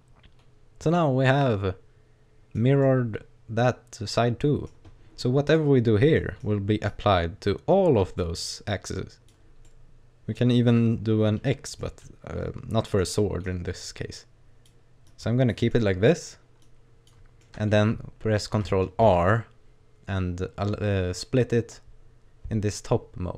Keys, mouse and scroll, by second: 2.8 middle click, 4.9-5.5 scroll up 2, 5.5 right click, 5.7-6.2 scroll down 2, 6.2 middle click, 6.9 click, 8.9 click, 9.7 middle click, 11.8 middle click, 13.2 middle click, 14.1 click, 15.1 click, 15.7 middle click, 16.7 click, 17.5 middle click, 19.0 ctrl+r.